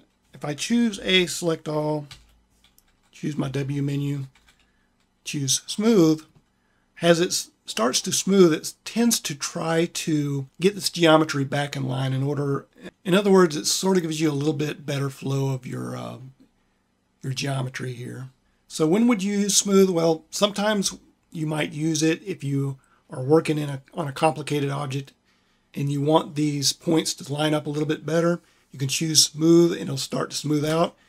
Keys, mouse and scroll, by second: 0.8 a, 2.0 a, 3.2 q, 5.2 w.